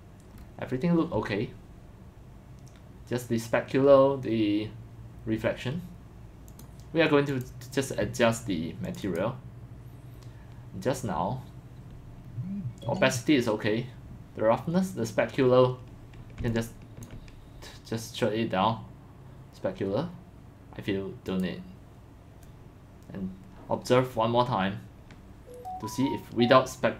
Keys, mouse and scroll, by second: 0.1-0.7 scroll, 2.9-3.3 drag, 6.5 click, 7.3 click, 7.7 click, 8.8 click, 9.0 click, 10.8 scroll down 1, 11.0 middle click, 12.2 middle click, 12.4 middle click, 12.4 scroll, 16.5 scroll, 17.0-19.3 ctrl+drag, 21.3 click, 21.4-22.6 drag, 26.3-26.6 drag.